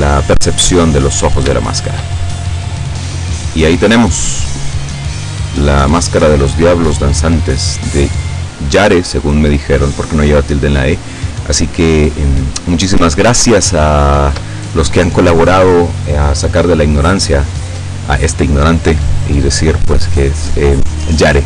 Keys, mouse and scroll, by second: 0.6-0.9 scroll up 2, 0.9-1.5 scroll down 2, 1.7 shift+middle click, 2.6 middle click, 3.0 middle click, 3.9-8.2 middle drag, 8.4 scroll up 2, 12.0-12.3 scroll down 2, 13.5-14.6 shift+drag, 16.8-20.0 drag.